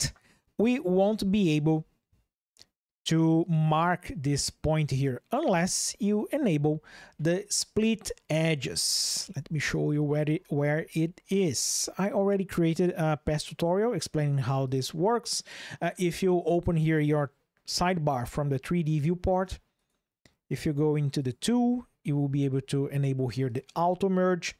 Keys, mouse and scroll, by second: 3.2 click, 9.1 ctrl+z, 14.4 click, 19.5 click, 20.9 click, 23.2 click, 24.5 ctrl+shift+\.